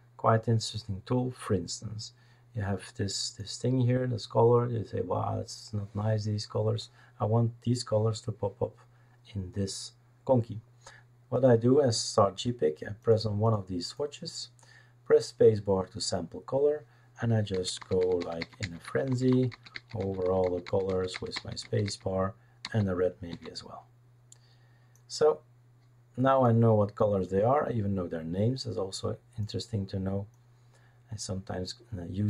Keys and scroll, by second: 17.5-23.3 typing.